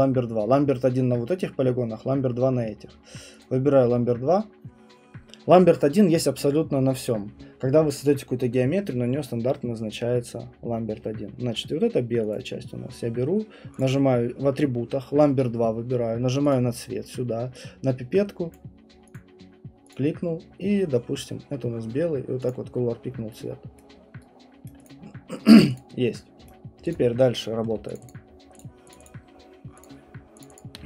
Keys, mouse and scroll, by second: 3.4 click, 9.9 middle click, 12.3 click, 13.8 click, 16.5 click, 18.5 click, 19.1 click, 19.9 click, 22.5 click, 23.8 right click, 24.7 right click, 24.9 click, 25.8 click, 26.5 right click, 26.9 click, 27.9 shift+click, 28.1 shift+click, 28.6 shift+click, 28.9 shift+click, 29.1 shift+click, 30.4 shift+click.